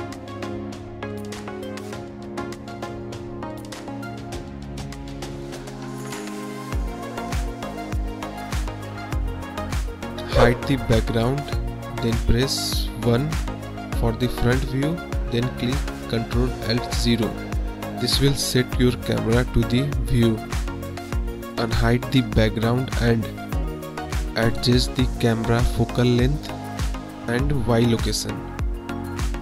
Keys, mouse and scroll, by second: 0.1 click, 0.8 middle drag, 1.2 KP_1, 2.3 click, 3.4 click, 3.5 KP_Decimal, 4.0 middle drag, 7.1 click, 8.5 KP_1, 8.9 click, 10.1 KP_1, 10.5 KP_Decimal, 11.9 click, 12.7 click, 12.7 typing, 14.7 KP_Decimal, 15.5 drag, 16.1 drag, 16.3 middle click, 16.6 KP_1, 19.8 ctrl+alt+KP_0, 23.3 click, 25.4-28.2 drag.